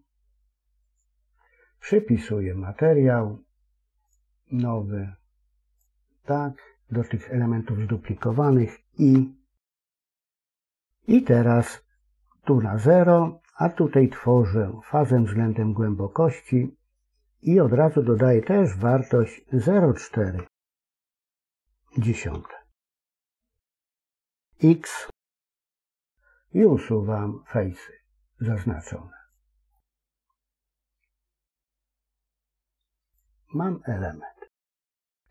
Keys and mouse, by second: 3.9 click, 5.6 click, 6.5 middle click, 8.9 i, 12.0 click, 14.7-18.2 drag, 18.6-23.7 drag, 20.4 BackSpace, 20.8 BackSpace, 25.6 x, 29.7-30.9 middle drag, 33.4 middle click, 34.5 KP_3.